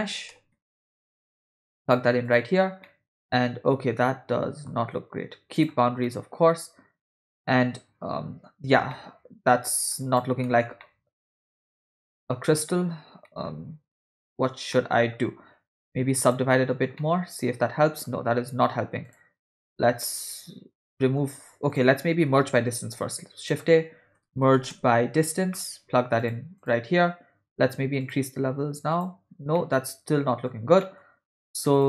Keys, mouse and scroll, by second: 2.9-4.7 middle drag, 5.6 click, 6.1-8.5 middle drag, 8.9 middle click, 10.0 click, 10.5 middle click, 10.9-12.8 middle drag, 13.3 middle click, 14.0 middle click, 14.2-14.7 scroll up 1, 14.7 middle click, 16.3 click, 17.0-18.1 middle drag, 19.1 click, 19.5 middle click, 20.2 click, 21.0 middle click, 21.7 click, 22.4 middle click, 22.8 shift+a, 28.0 click, 28.9 click, 29.6-30.6 middle drag, 30.8 middle click, 31.4 click, 31.8 click.